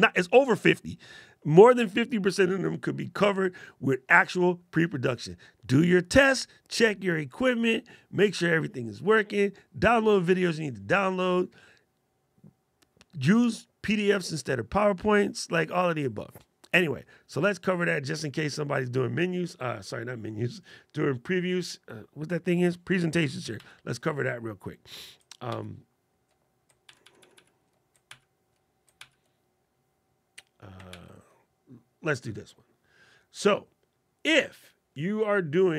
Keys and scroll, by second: 23.3 super+Right, 25.2 super+Right, 26.6 super+Right, 27.8 super+Right, 28.7 super+Right, 30.6 super+Right.